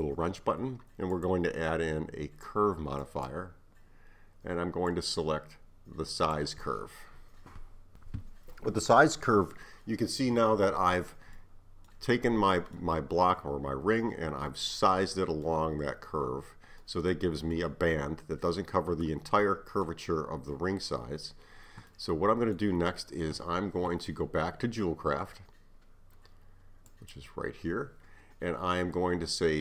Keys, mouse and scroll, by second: 1.1-4.2 drag, 4.9-7.9 drag, 11.4-24.9 middle drag, 26.9 click.